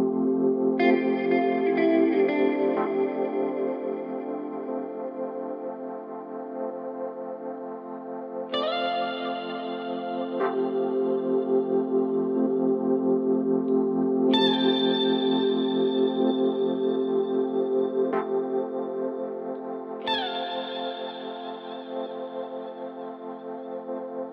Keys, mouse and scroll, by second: 2.6-4.4 drag, 4.8 g, 8.0 s, 13.5 s, 16.6 s, 19.4 g, 21.2 s.